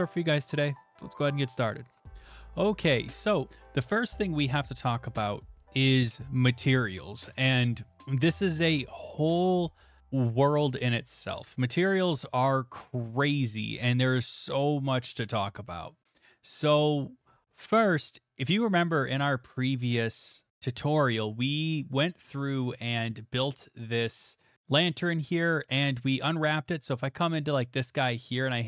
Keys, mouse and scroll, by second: 0.2 click, 0.5 alt+right click, 24.0-24.6 scroll, 24.6-25.7 scroll, 26.5 click, 27.0-27.4 shift+scroll, 27.8 shift+middle click, 28.4 Tab.